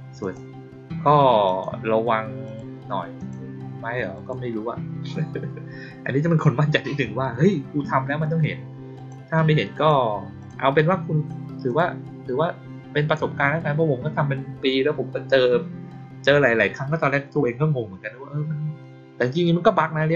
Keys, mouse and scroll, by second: 0.1 click, 1.4 click, 2.4 click, 3.1 click, 4.0 click, 8.9 click, 9.6 click, 10.3 click, 11.6 click.